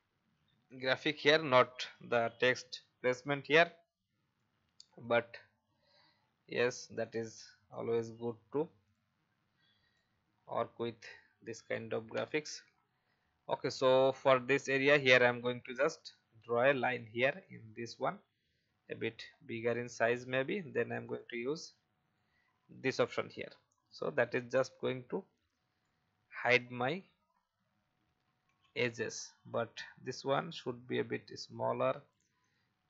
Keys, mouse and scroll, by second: 0.6 click, 4.3 alt+click, 5.9 shift+click, 7.7 shift+click, 8.8 click, 10.3-10.7 alt+scroll up 1, 12.1 Delete, 13.6 click, 15.7 shift+click, 16.2 shift+v, 16.8 click, 18.4 shift+scroll up 1, 19.2-20.0 shift+scroll up 1, 20.0 click, 24.8 alt+click, 26.8 alt+scroll up 1, 28.0 ctrl+d, 28.5 ctrl+d, 29.2-29.5 alt+scroll up 1, 30.5-32.0 drag.